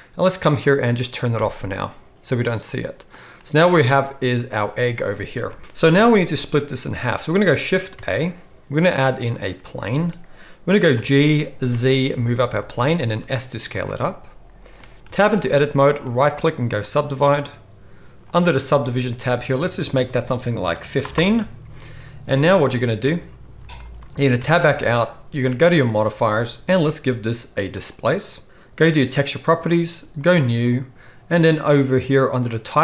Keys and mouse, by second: 1.3 click, 2.6 click, 4.0 click, 5.5 g, 5.8 KP_1, 7.9 shift+a, 10.9 g, 13.0 s, 15.0 Tab, 15.4 middle click, 16.0-18.0 right drag, 18.0 click, 18.4 middle click, 22.7 click, 22.7 middle click, 22.7 right click, 24.3 Tab, 25.8-26.7 drag, 29.3-30.3 drag.